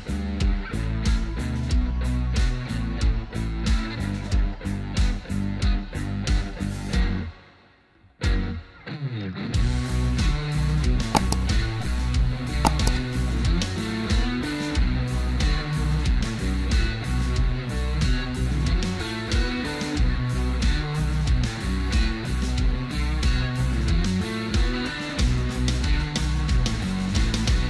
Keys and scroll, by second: 2.0 ctrl+f, 10.9 ctrl+f, 11.3 ctrl+alt+space.